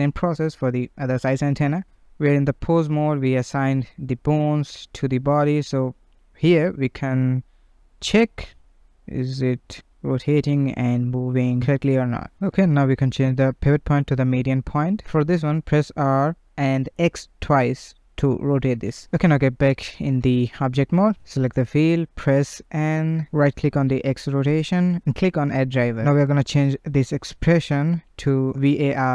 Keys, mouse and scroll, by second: 0.5 shift+click, 1.4 shift+click, 1.8 ctrl+Tab, 2.4 click, 3.1 ctrl+p, 4.1 scroll down 1, 4.2-4.6 shift+middle drag, 4.6 click, 5.7 g, 5.9 g, 6.1 g, 6.9 click, 8.3 r, 11.3 ., 13.0 click, 13.4-14.5 middle drag, 14.5 r, 18.3-19.1 middle drag, 20.0 ctrl+Tab, 21.2 click, 21.7 n, 23.8-26.9 right drag.